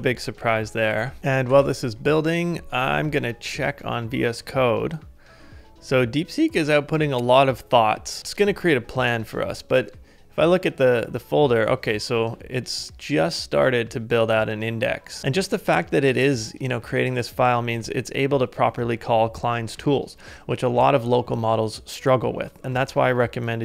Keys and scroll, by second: 0.2 ctrl+d, 1.0 ctrl+d, 1.5 super+Tab.